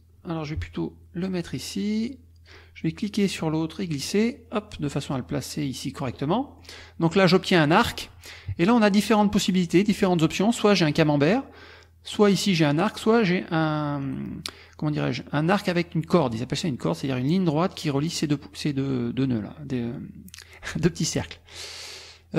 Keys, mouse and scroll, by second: 4.0-6.3 drag, 6.5 middle click, 6.5-7.1 scroll up 1, 7.1 click, 10.5 click, 12.1 click, 16.1 click.